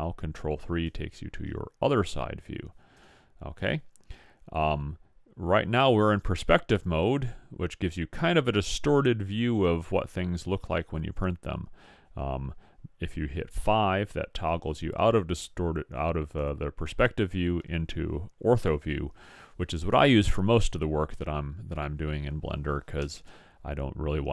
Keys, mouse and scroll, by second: 2.9 KP_7, 5.0-6.1 middle drag, 6.5-8.2 middle drag, 13.7 KP_5, 16.4 KP_5.